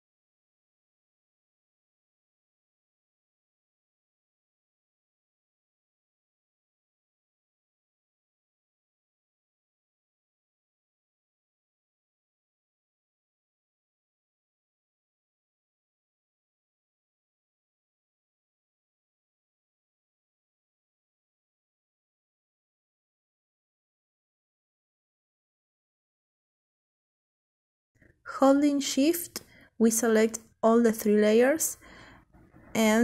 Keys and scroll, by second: 6.3 Down, 6.4 Down, 11.2 Down, 11.4 Down, 11.6 Down, 12.3 Right, 16.5 ctrl+t, 21.2 ctrl+t, 21.8 ctrl+Caps_Lock.